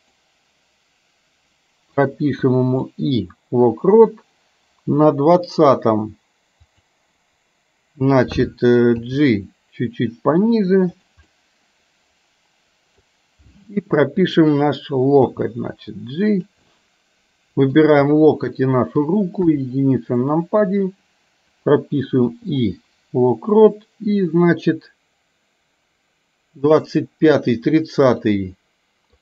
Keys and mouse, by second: 2.2 i, 3.0-5.7 drag, 6.8 click, 9.2 g, 11.3-13.0 middle drag, 14.4 click, 15.4 g, 16.8-17.8 middle drag, 18.8 shift+click, 19.5 KP_1, 22.3 i, 23.7-27.8 drag, 28.3-29.2 middle drag.